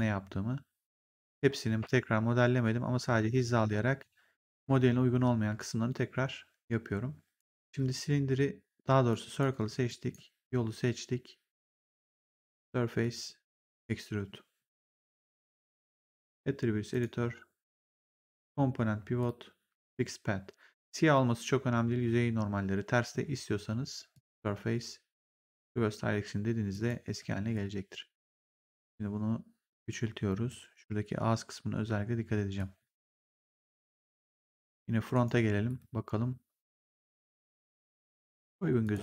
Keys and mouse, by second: 7.6 click, 9.0 click, 9.8 click, 12.0 click, 13.6 click, 15.7 click, 16.8 click, 18.2 click, 24.0 click, 25.5 click, 26.6 click, 27.1 r, 28.3 click, 32.5 click, 35.0 right click, 35.6 click, 37.9 right click, 38.7 click.